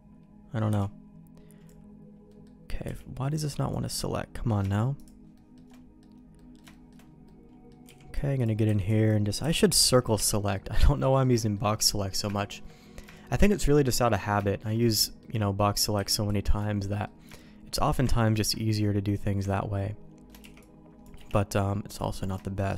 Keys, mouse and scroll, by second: 0.6 b, 2.2 middle click, 2.8 b, 4.9 click, 5.3 middle click, 5.6 middle click, 6.3 middle click, 6.6-7.6 shift+middle drag, 7.8 b, 8.6 b, 9.3 c, 10.3 middle click, 11.0 middle click, 11.3 shift+middle click, 11.6 middle click, 12.3 shift+middle click, 13.1 shift+middle click, 13.5 middle click, 14.0 middle click, 14.4 shift+middle click, 14.9 middle click, 15.9 b, 16.8 middle click, 17.2 shift+middle click, 18.0 ctrl+middle click, 18.5 middle click, 19.4 shift+middle click, 20.3 c, 21.9 middle click, 22.4 middle click.